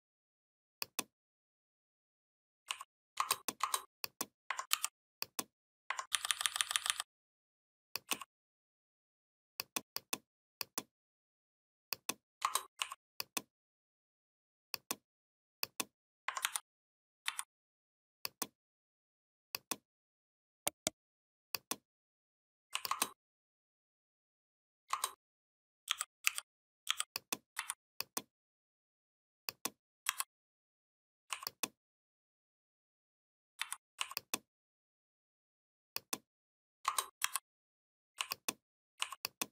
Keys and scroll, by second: 4.5 ctrl+g, 5.9 ctrl+[, 16.2 ctrl+c, 17.1 ctrl+v, 25.7 i, 26.0 u, 26.7 i, 27.4 v, 33.4 v, 37.0 shift+m.